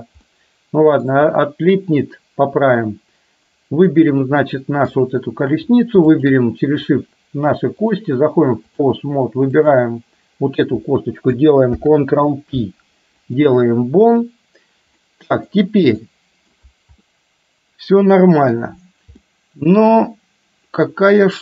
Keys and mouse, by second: 0.4-1.1 middle drag, 4.6 middle click, 6.1 shift+click, 8.0 click, 9.7 click, 11.7 ctrl+p, 15.1 middle click, 16.1-16.6 middle drag, 17.1-18.6 middle drag, 19.4-21.4 middle drag.